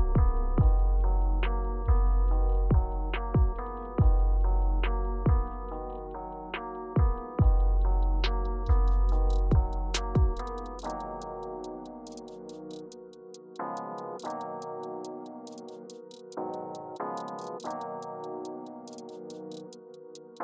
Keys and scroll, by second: 6.5 Return, 7.7 Down, 8.0 Down, 8.8 Right, 10.0 Return, 11.2 Return, 12.6 Return, 15.5 Return, 16.4 Left, 16.9 Return.